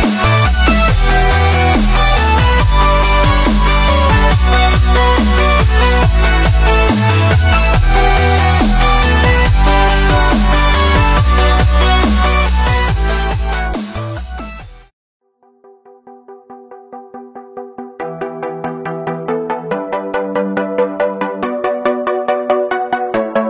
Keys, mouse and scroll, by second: 0.3 click, 0.6-1.1 middle drag, 1.1 click, 2.0 scroll down 1, 2.1-2.4 middle drag, 2.4 click, 2.6 click, 2.8-4.1 drag, 4.1-5.9 middle drag, 5.9 shift+d, 7.1-8.0 drag, 8.0 scroll up 1, 8.0-8.7 middle drag, 8.7 s, 12.6-13.3 middle drag, 13.3 s, 14.2 s, 15.3-16.5 middle drag, 16.5 ctrl+z, 16.8 s, 17.5-18.0 middle drag, 18.0-19.0 drag, 19.0-19.6 middle drag, 19.6 click, 20.8-21.5 middle drag, 21.5 click, 22.0 middle click, 22.9 click, 23.3-23.4 middle drag.